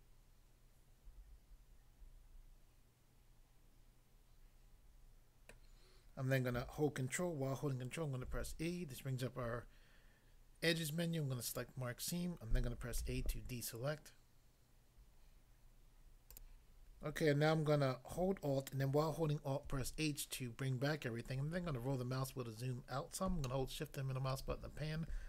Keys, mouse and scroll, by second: 5.5 middle click, 8.2 ctrl+e, 11.5 click, 13.0 a, 16.3 click, 16.4 double click, 19.7 alt+h, 21.2 scroll down 1, 23.5 shift+middle click.